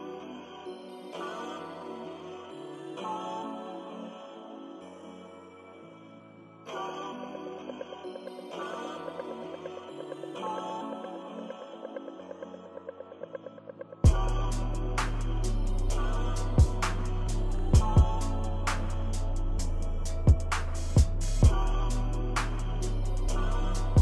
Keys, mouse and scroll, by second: 0.0 click, 0.0 ctrl+-, 0.2 click, 0.4 click, 1.5 ctrl+-, 1.9 ctrl+scroll up 2, 2.2 click, 2.8 click, 3.5 ctrl+=, 3.8 click, 6.4 click, 6.7 ctrl+=, 6.7 ctrl+scroll up 1, 6.8 click, 7.3 click, 7.7 click, 8.4 ctrl+=, 8.5 click, 9.3 click, 9.5 ctrl+=, 9.6 click, 10.5 click, 10.7 click, 11.3 click, 11.7 click, 12.2 ctrl+-, 12.3 ctrl+=, 12.4 click, 12.8 click, 13.4 click, 13.9 ctrl+=, 13.9 ctrl+scroll up 1, 13.9 ctrl+scroll down 1, 14.1 click, 14.5-15.5 drag, 15.7 ctrl+=, 15.9 click, 16.7 click, 17.0 ctrl+z, 17.2 click, 18.1 ctrl+-, 18.2 ctrl+middle click, 18.4 ctrl+=, 18.5 click, 19.4 ctrl+-, 19.6 ctrl+middle click, 19.6 ctrl+=, 19.9 click, 21.7 click, 22.0 -, 22.2 ctrl+=, 22.3 click, 22.9 click, 23.4 ctrl+-, 23.5 ctrl+=, 23.6 click.